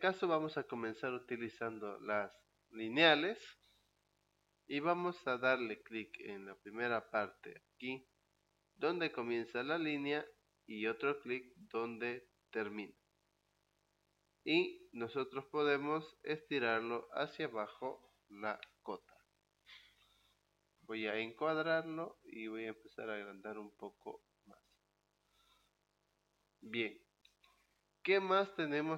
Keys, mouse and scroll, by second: 3.0 click, 7.3 click, 12.7 click, 14.0 middle click, 14.0 scroll up 2, 16.5 click, 18.6 e, 20.7 Return, 21.4 click, 23.7 click, 24.8-25.2 scroll up 2, 25.7 middle click, 26.2 click, 27.4 Escape.